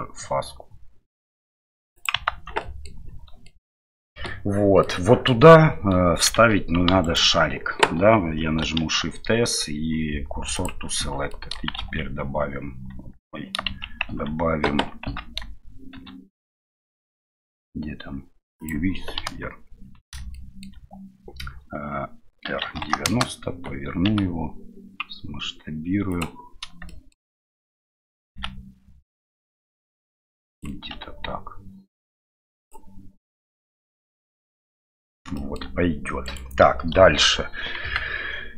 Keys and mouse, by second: 2.3 Tab, 2.6 middle click, 3.4 middle click, 4.8 middle click, 6.3 Tab, 8.8 shift+s, 11.0 Tab, 11.3 middle click, 11.8 shift+z, 11.8 shift+a, 14.1 Tab, 15.9 shift+a, 19.2 KP_1, 20.4 middle click, 22.4 r, 27.0 shift+middle click, 33.6-34.8 middle drag, 35.3 shift+middle drag, 36.2 right click, 37.0 KP_7.